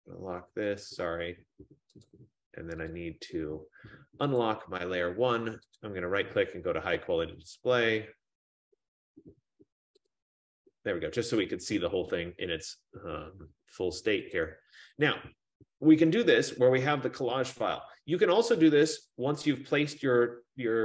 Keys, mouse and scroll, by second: 2.2 click, 3.1 click, 4.5 click, 6.0 right click, 10.2 click, 12.9 F15, 14.4 click.